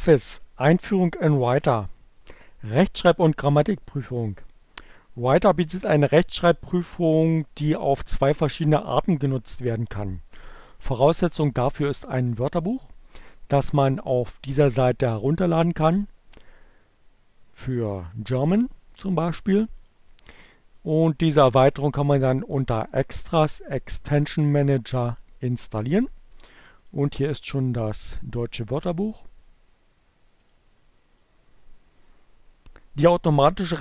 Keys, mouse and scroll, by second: 12.3 middle click, 12.3 scroll down 1, 19.4 click, 21.0 click, 23.4 click, 25.5 click, 30.2 click, 30.8 click.